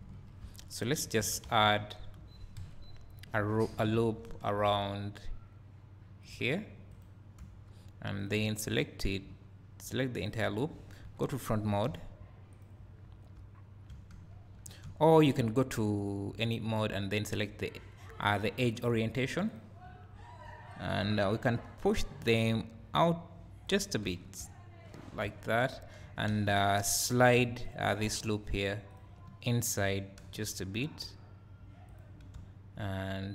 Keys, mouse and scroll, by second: 0.0 KP_3, 0.4 Tab, 1.2 alt+a, 2.6 KP_1, 2.9 KP_3, 4.1 ctrl+r, 7.0 right click, 7.4 1, 8.2 click, 11.0 KP_1, 12.5 z, 12.6 click, 13.3 `, 17.2-19.7 drag, 20.6 scroll up 1, 21.9-27.7 drag, 23.9 scroll down 2, 24.2 Tab, 24.4 `, 24.9-25.3 scroll down 2, 25.3 Tab, 25.4 Tab, 26.3 2, 27.4 1, 29.0 ctrl+click, 29.3 scroll up 1, 30.3 g, 31.9 click, 32.4 `.